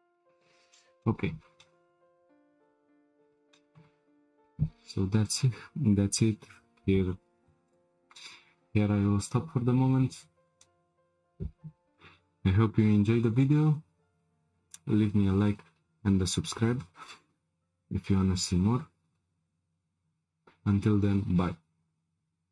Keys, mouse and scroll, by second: 0.0 Tab, 0.2-0.7 scroll down 7, 0.7-2.6 shift+middle drag, 2.6-3.4 scroll down 1, 3.4 scroll down 1, 3.5-4.9 shift+middle drag, 4.9 click, 5.2-8.3 drag.